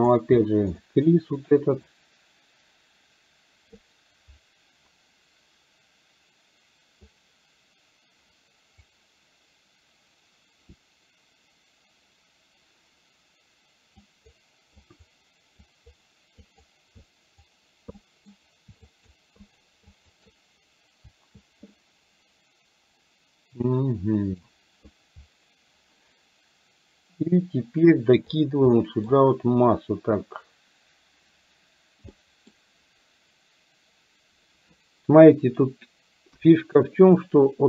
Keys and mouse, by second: 0.9 middle click, 2.0-3.8 drag, 7.0-8.9 drag, 14.1 click, 14.9 click, 15.6 click, 16.5 click, 17.0 click, 18.0 middle click, 19.0 shift+click, 19.4 shift+click, 20.0 shift+click, 21.8-23.6 middle drag, 23.8 middle click, 28.4 click, 28.8 middle click, 32.3 middle click, 36.5 KP_1.